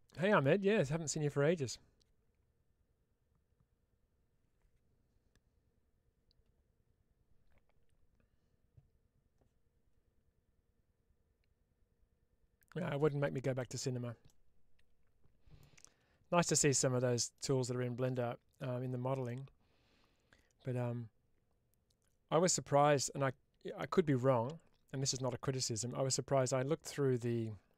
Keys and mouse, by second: 14.1-15.9 middle drag, 16.6 ctrl+s, 19.1-22.4 middle drag.